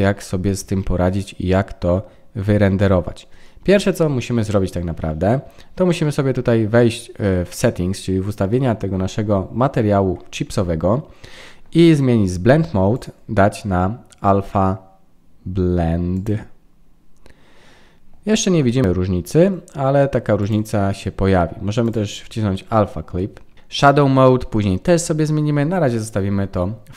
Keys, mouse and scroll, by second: 3.1-4.2 scroll down 7, 7.5-9.2 scroll up 14, 9.2-9.7 scroll up 5, 9.7 scroll down 2, 9.8-10.4 scroll down 6, 10.8-12.4 scroll down 13, 12.9 click, 20.4 click.